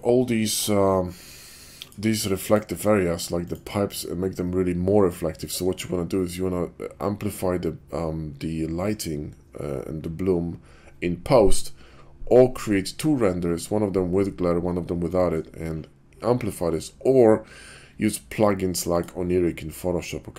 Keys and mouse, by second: 2.4 click, 3.7 click.